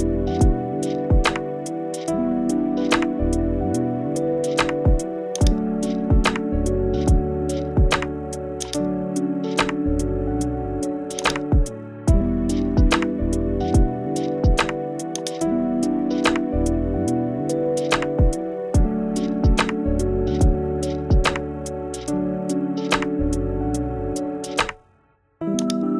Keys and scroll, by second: 1.0 super+g, 3.7 super+j, 17.7 Left.